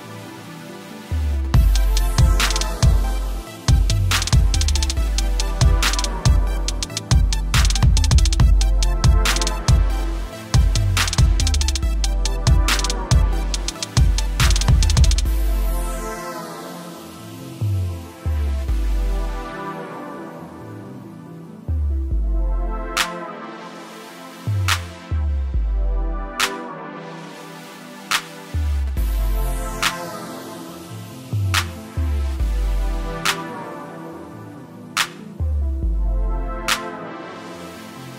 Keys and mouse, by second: 6.4 typing, 8.3 click, 13.2 alt+Num_Lock, 13.8 click, 16.7 click, 18.2 click, 20.6 click, 23.2 click, 23.9 alt+click, 25.2-26.2 typing, 27.3 click, 29.6 click, 29.8 typing, 30.3 click, 31.8-32.2 typing, 34.2-34.6 typing, 34.8 click, 37.6 space, 37.7 click, 37.8 s.